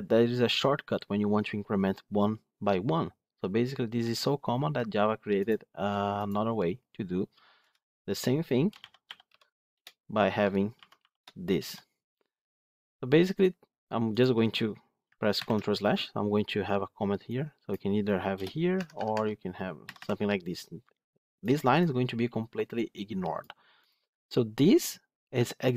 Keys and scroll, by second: 9.6 Return, 15.2 ctrl+/, 18.6 Tab.